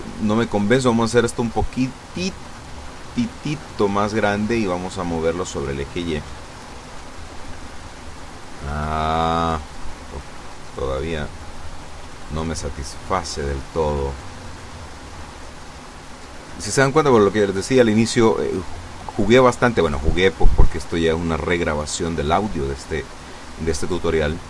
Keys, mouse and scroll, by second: 0.4 click, 4.0 click, 5.1 click, 5.5 click, 7.2 click, 11.2 click, 13.8 click.